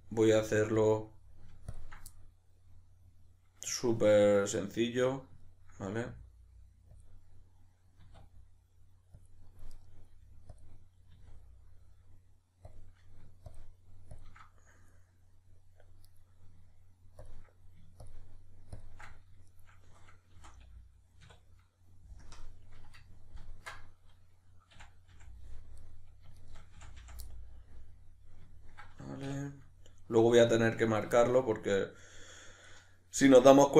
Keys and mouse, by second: 0.3 g, 0.9 click, 1.7 ctrl+click, 2.1-7.1 middle drag, 6.0 g, 7.1 click, 8.0 e, 9.3 click, 9.7 right click, 10.1 g, 10.6 click, 11.1 e, 12.8 click, 13.5-14.5 ctrl+drag, 14.5-16.1 middle drag, 16.1 right drag, 17.3 ctrl+click, 19.5 shift+right click, 20.3 f, 21.3 \, 22.3 KP_Decimal, 22.6-25.8 middle drag, 24.7 f, 25.8 right click, 26.4 shift+right drag, 26.7 f, 27.2-33.7 middle drag, 29.2 \.